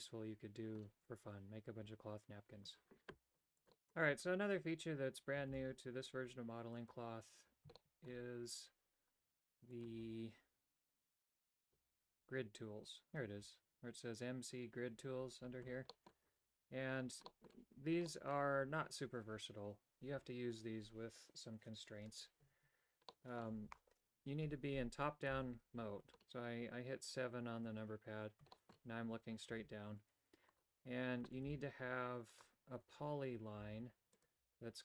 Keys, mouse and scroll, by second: 5.4 shift+a, 7.7 shift+middle click, 9.7 click, 15.9 middle click, 16.2 Tab, 17.2 middle click, 17.7 Tab, 18.0 middle click, 23.0 middle click, 25.2 KP_7, 28.5 shift+middle click, 29.4 Tab, 30.5 right click, 31.4 shift+d, 33.5-34.8 typing.